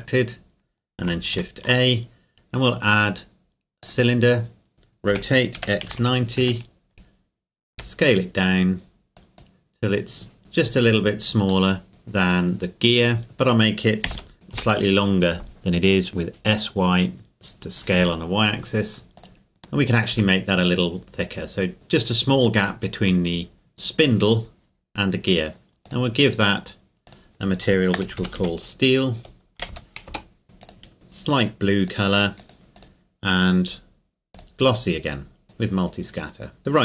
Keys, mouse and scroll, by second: 1.3 shift+a, 3.8 click, 5.1 r, 5.6 x, 5.9 KP_9, 6.0 KP_0, 6.4 KP_Enter, 7.7 s, 9.2 click, 10.4 KP_Decimal, 10.9 scroll down 1, 11.7 middle click, 14.1 s, 14.5 y, 19.2 click, 19.6-20.1 scroll up 1, 20.1 s, 22.6 click, 23.3 middle click, 25.9 click, 27.9-28.3 typing, 29.6 typing, 30.1 Return, 30.6 click, 31.9 click, 36.6-36.8 scroll down 1.